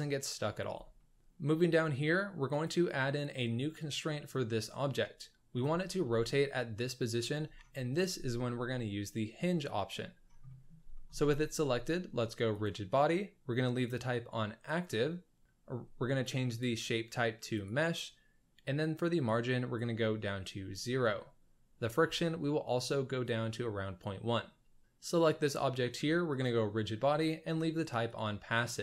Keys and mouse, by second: 1.0 ctrl+shift+s, 1.0 shift+middle click, 2.5 click, 5.7 shift+middle drag, 6.1 middle drag, 10.4 middle click, 10.9 shift+middle drag, 12.5 click, 16.6-17.8 drag, 19.4 click, 21.8-23.3 drag, 26.5-28.2 drag.